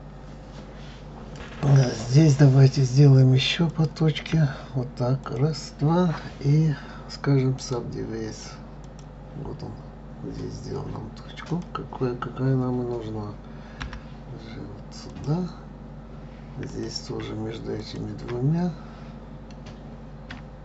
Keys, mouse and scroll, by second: 3.7 click, 5.2 shift+click, 7.5 right click, 8.9-11.5 right drag, 11.5 click, 13.8 g, 16.6 click, 17.8 shift+click.